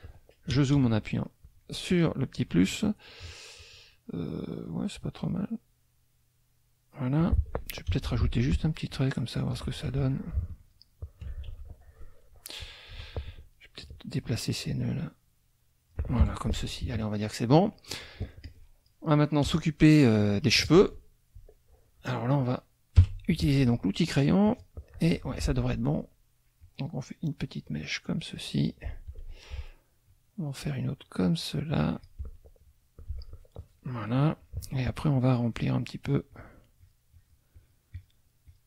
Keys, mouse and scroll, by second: 0.5 KP_Add, 1.3 click, 1.9 click, 3.0 click, 5.3-7.1 drag, 7.9 F6, 8.9 shift+click, 10.6 ctrl+shift+z, 10.6 ctrl+shift+click, 11.5 ctrl+shift+z, 12.9 F2, 13.2 click, 14.6-16.1 alt+drag, 16.2 alt+F1, 16.5 alt+KP_Subtract, 17.8 middle click, 18.4 click, 19.4 KP_Add, 20.1 middle click, 23.0 F6, 24.5 click, 25.4 ctrl+z, 26.6-28.5 drag, 30.1-32.2 shift+drag, 35.4 shift+click, 35.8 shift+click, 36.8 shift+click, 37.1 shift+click, 37.6 shift+click, 38.0 shift+click, 38.4 shift+click.